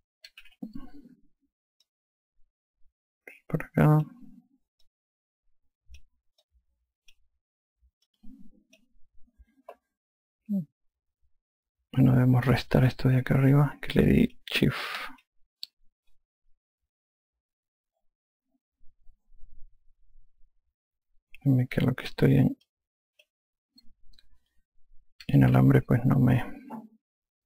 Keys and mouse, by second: 1.3 n, 2.9 shift+click, 5.9 shift+click, 7.5 shift+click, 9.1 shift+click, 13.9 ctrl+click, 15.1 ctrl+click, 23.7 click, 26.1-27.0 typing.